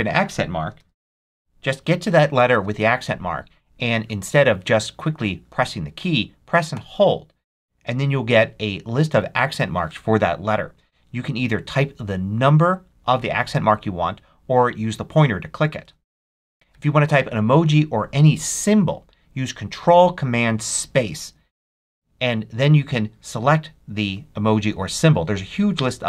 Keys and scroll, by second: 0.4-1.7 typing, 6.6 e, 15.7 2, 20.8 ctrl+super+space.